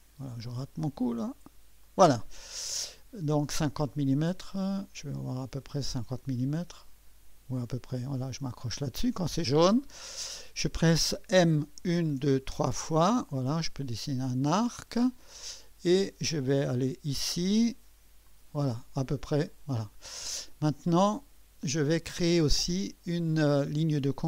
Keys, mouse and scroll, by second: 1.8 click, 8.7 click, 14.5 click, 14.5 typing, 18.2 click.